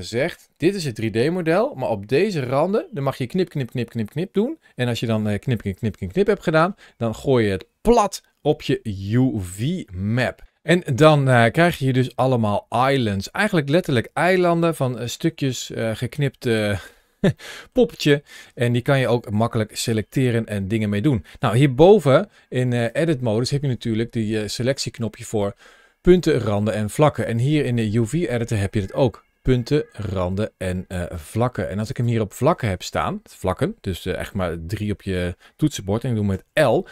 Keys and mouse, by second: 5.9 ctrl+shift+a, 12.6 click, 14.5 shift+middle click, 15.7 shift+middle click, 16.3 shift+middle click, 17.2 shift+middle click, 22.6 ctrl+shift+a, 31.7 click, 34.6 3, 36.1 l.